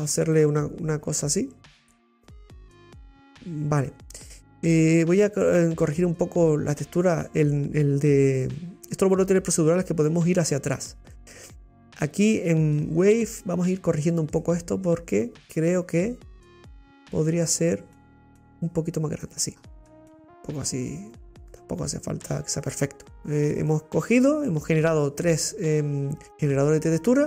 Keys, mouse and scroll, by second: 0.1 scroll down 2, 0.3-3.6 middle drag, 3.6-4.3 scroll down 2, 14.2 scroll up 7, 14.4 middle click, 14.9-16.0 scroll up 1, 16.0-18.8 drag, 19.5-19.8 scroll down 3, 19.8-22.8 middle drag, 26.4 click.